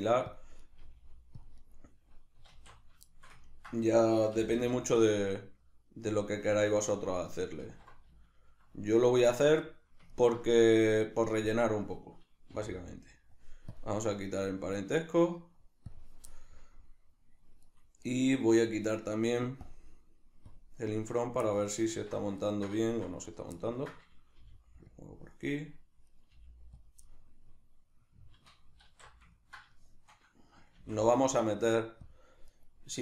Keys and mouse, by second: 0.4 click, 0.6 right click, 0.8 g, 1.4 click, 1.6 right click, 2.5 alt+q, 3.1-6.2 shift+middle drag, 4.4 g, 6.2 click, 6.6 alt+q, 8.3 shift+middle click, 9.0 right click, 9.3-11.6 middle drag, 11.6 right click, 12.5 h, 13.7-16.3 drag, 16.3-17.7 middle drag, 17.7-19.6 right drag, 19.6 click, 20.5 click, 21.1 right click, 21.4-23.3 middle drag, 21.9 alt+q, 23.3 right click, 23.5-24.9 ctrl+middle drag, 24.3 g, 24.9 click, 26.1 right click, 26.3 g, 26.9 click, 27.1-32.2 middle drag, 28.9 alt+q, 30.8 shift+d, 32.2 click, 32.6 right click.